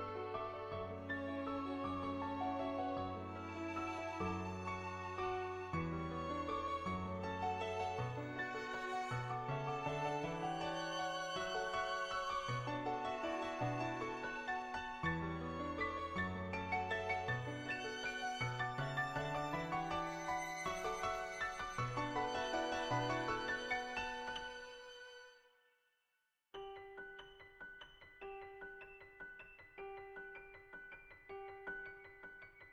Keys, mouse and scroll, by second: 1.4 middle click, 1.7 middle click, 2.9 g, 3.7 shift+middle click, 5.2 s, 6.0 s, 8.2 middle click, 8.8 click, 9.0 shift+middle click, 9.6 middle click, 11.0 middle click, 11.3 shift+middle click, 11.5 middle click, 12.0 shift+middle click, 12.3 shift+middle click, 13.7 middle click, 14.5 shift+middle click, 15.8-17.2 drag, 17.3 shift+middle click, 17.5 middle click, 18.2 shift+middle click, 18.7 middle click, 18.9 shift+middle click, 20.9 click, 23.2 Tab, 23.9 Tab, 24.4 a, 24.7 u, 26.7 Tab, 27.5 Tab, 27.7-28.8 drag, 31.6 shift+middle click, 32.5 shift+middle click.